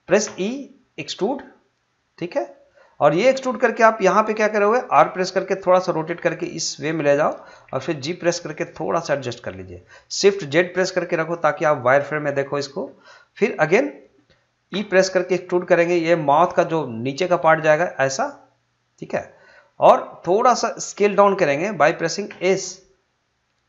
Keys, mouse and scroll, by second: 0.2 e, 2.7 click, 4.9 r, 7.6 g, 9.7 click, 10.6 shift+z, 19.0 click, 22.3 s.